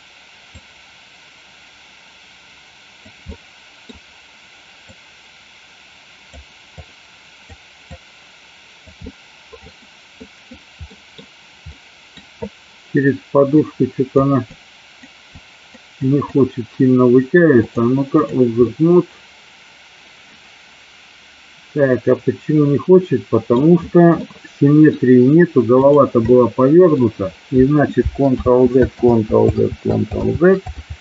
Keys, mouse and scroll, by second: 0.7-3.1 drag, 3.3 middle click, 5.0-6.3 drag, 6.8 click, 7.8 click, 9.2 middle click, 10.3 middle click, 11.0 middle click, 11.8 middle click, 13.8 click, 14.5 click, 15.5 click, 16.1 click, 17.8-18.5 drag, 18.7-23.7 middle drag, 24.3 middle click, 25.7 click, 26.3 middle click, 28.6 ctrl+z, 29.2 ctrl+z, 29.6 ctrl+z, 30.3 ctrl+z.